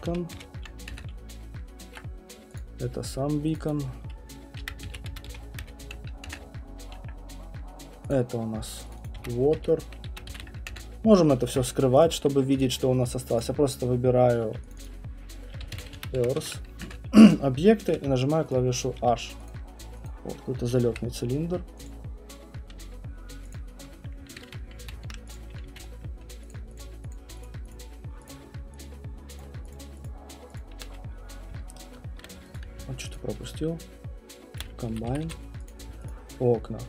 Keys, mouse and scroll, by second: 0.0-0.8 typing, 0.9 Return, 2.6 click, 3.6 click, 3.6-6.2 typing, 4.6 click, 8.1 click, 8.9-12.7 typing, 8.9 click, 9.1 click, 12.0 click, 12.6 click, 13.4 click, 14.5-16.9 typing, 14.7 click, 14.8 click, 17.9 h, 18.5 click, 19.0 h, 19.5 click, 20.1 click, 20.9 Delete, 21.9 click, 22.7 h, 23.5 click, 24.4 ctrl+z, 24.8 ctrl+z, 25.3 click, 25.6 q, 25.8 middle click, 26.5 shift+click, 26.8 shift+click, 27.1 shift+click, 27.4 shift+click, 28.3 shift+click, 29.4 shift+click, 32.7 alt+click, 34.8 shift+right click, 34.9 F1, 35.1 F1, 35.3 F1, 35.7 click, 36.4 shift+click.